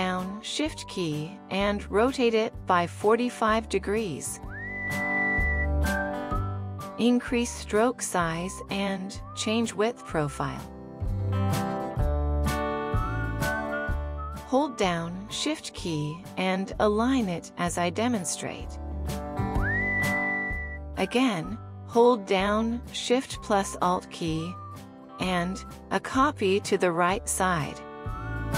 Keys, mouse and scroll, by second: 14.1 alt+scroll up 1, 14.9 alt+scroll up 1.